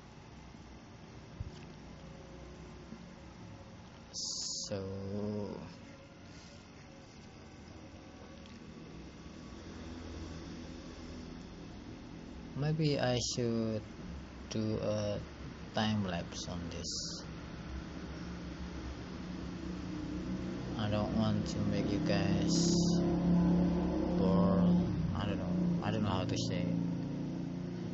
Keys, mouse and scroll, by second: 4.0 click, 5.0 click, 24.5-25.5 scroll down 5, 25.5 scroll up 3.